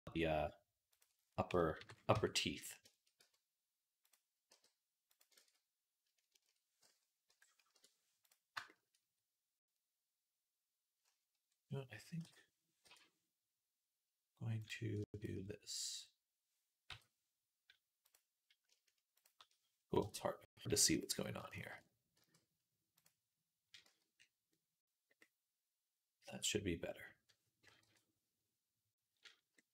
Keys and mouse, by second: 1.6 KP_3, 2.0 Tab, 2.8-24.1 shift+right drag, 3.0 z, 3.9 click, 3.9 middle click, 4.3 g, 5.3 ctrl+z, 7.1 ., 8.1 click, 12.0 k, 14.5 click, 14.5 middle click, 15.1 shift+click, 15.1 shift+middle click, 20.8 click, 20.8 middle click, 21.3 alt+shift+click, 21.3 alt+shift+middle click, 22.0 x, 23.7 z, 24.3-29.7 drag, 27.7 KP_3.